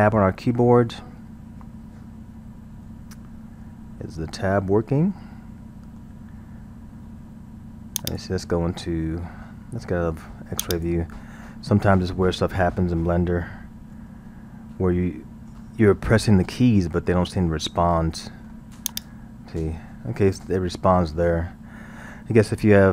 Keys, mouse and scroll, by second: 0.0 Tab, 1.4 scroll, 3.1 Tab, 3.6 Tab, 4.2 Tab, 4.9 scroll, 5.3-8.0 middle drag, 8.0 click, 9.3-10.6 middle drag, 10.6 click, 12.3 KP_1, 13.5-13.9 scroll, 13.9 Tab, 14.5 Tab, 15.0-15.7 middle drag, 16.7 Tab, 18.2-18.9 middle drag, 18.9 click, 19.5 Tab.